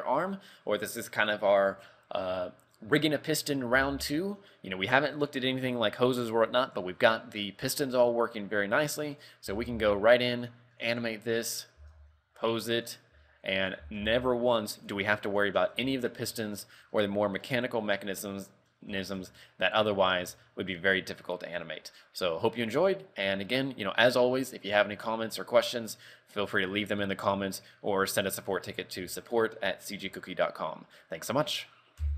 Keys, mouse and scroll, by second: 9.4 right click, 9.8 r, 11.6 right click, 11.8-12.7 scroll down 2, 12.0 r, 13.3 a, 13.8 right click, 14.0 r, 16.1 shift+middle click, 16.5 middle click, 17.2 middle click, 17.3 shift+middle click, 18.0 middle click, 18.6 middle click, 19.2 shift+middle click, 19.4 shift+middle click, 19.5-20.2 scroll up 2, 20.2 scroll down 1, 20.6 shift+middle click.